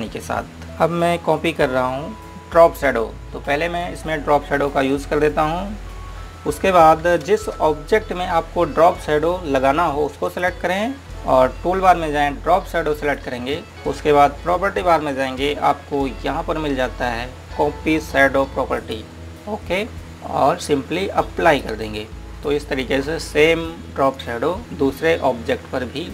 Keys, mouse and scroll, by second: 2.2 click, 8.4 space, 11.0 click, 13.6 click, 19.8 click, 22.6 click.